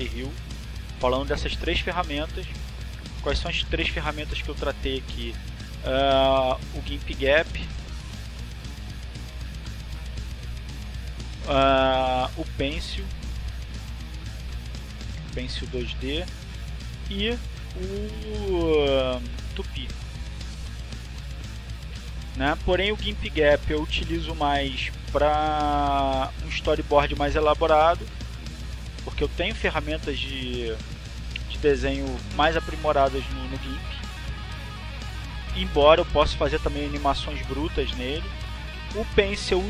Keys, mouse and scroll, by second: 0.8 click, 2.4 click, 5.3 click, 9.9 click, 11.6-14.0 drag, 14.2-15.9 drag, 16.1 click, 17.7-20.4 drag, 20.7-21.8 drag, 22.1 click, 24.9-26.7 drag, 26.8 click, 28.4-29.4 drag, 31.4-32.7 drag, 32.9-34.7 drag, 34.9-37.5 drag, 37.9 click, 38.9 click.